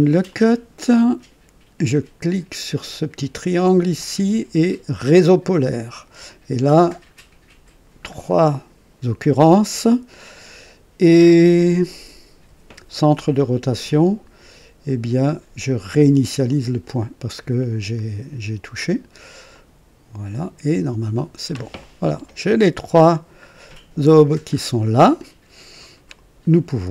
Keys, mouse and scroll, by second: 0.2 click, 3.9 click, 5.4 click, 7.2-7.9 scroll down 3, 16.4 click, 19.4 click, 21.7-24.3 drag, 24.5 scroll up 1, 25.1 click, 26.1 right click, 26.7-26.9 drag.